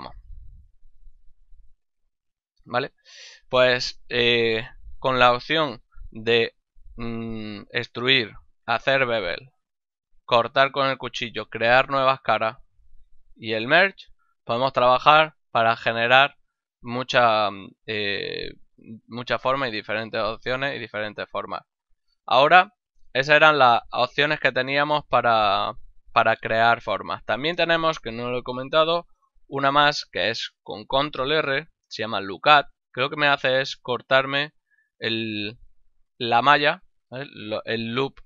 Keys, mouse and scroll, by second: 2.5 ctrl+middle click, 3.4 shift+middle click, 4.0 ctrl+middle click, 4.6 middle click, 5.3 middle click, 9.8 middle click, 12.4 middle click, 12.9 middle click, 19.8 middle click, 25.1 middle click, 25.8 middle click, 31.5 ctrl+r.